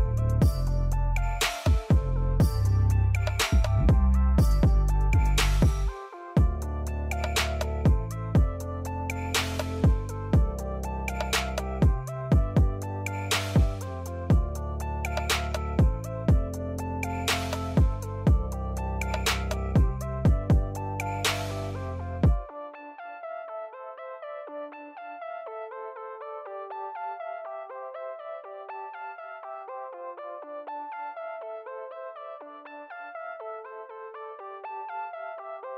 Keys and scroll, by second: 2.4 l, 3.7 Escape, 4.3 x, 5.6-9.8 typing, 27.3 typing, 28.5 typing, 34.5-35.4 typing.